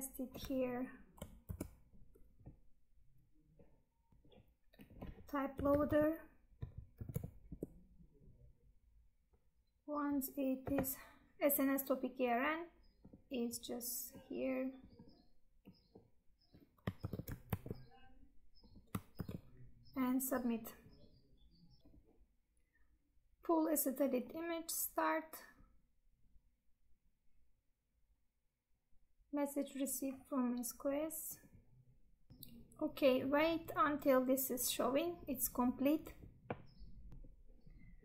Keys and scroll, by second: 17.0 ctrl+c, 18.7 Tab, 19.1 ctrl+v.